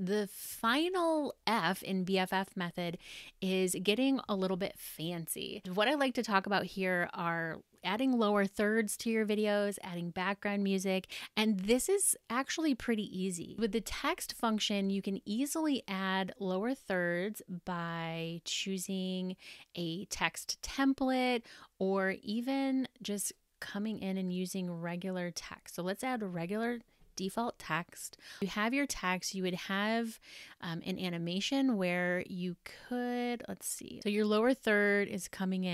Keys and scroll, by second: 34.3 space.